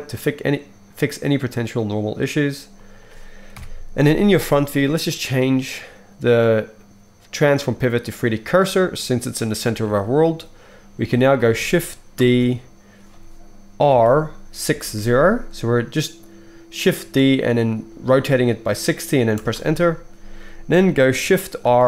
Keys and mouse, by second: 1.5 right click, 2.0 middle click, 2.2 right click, 2.9 middle click, 3.5 KP_1, 3.6-5.1 right drag, 5.1-6.5 middle drag, 12.2 shift+d, 21.6 shift+r.